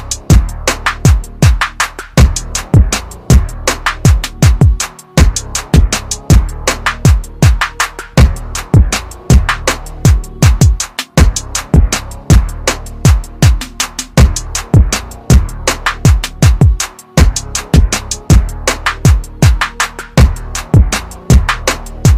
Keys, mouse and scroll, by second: 3.4-4.0 scroll up 1, 9.2 scroll up 1, 12.6 click, 15.4 click, 16.5 ctrl+z, 18.0 ctrl+z, 19.3 alt+click, 20.8 ctrl+z, 21.8 click.